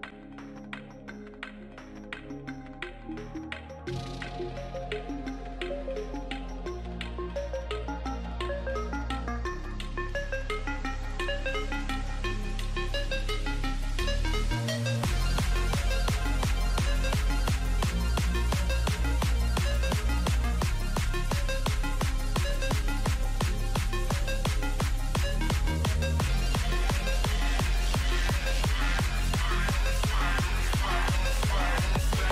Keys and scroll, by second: 10.7 shift+a.